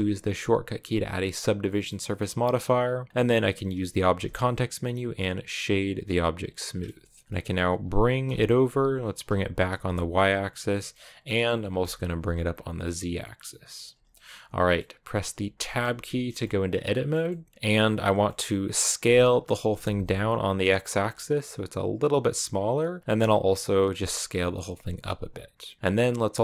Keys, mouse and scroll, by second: 1.5 middle click, 1.8-5.6 scroll up 2, 5.6 w, 6.4 middle click, 7.2 g, 10.5-11.5 middle drag, 11.5 g, 13.9-15.4 middle drag, 15.4 Tab, 15.7-16.9 middle drag, 16.9 shift+scroll up 2, 17.1-18.8 middle drag, 18.8 s, 23.0 middle click, 23.8 s.